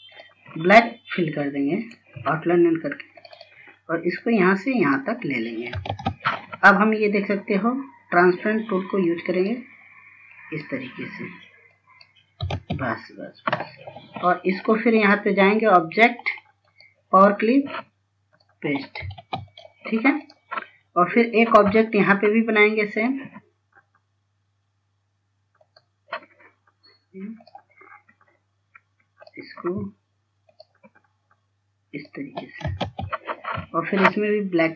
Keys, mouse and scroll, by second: 0.4 click, 2.0 right click, 2.8 scroll up 1, 3.4 click, 5.6 scroll down 1, 6.2 ctrl+space, 8.4-12.8 drag, 12.9 ctrl+space, 15.4 click, 19.7 ctrl+space, 20.0 click, 21.4 scroll up 1, 23.5 click, 28.3 scroll down 1, 28.9-29.8 scroll up 1, 29.8 click, 33.5 ctrl+space.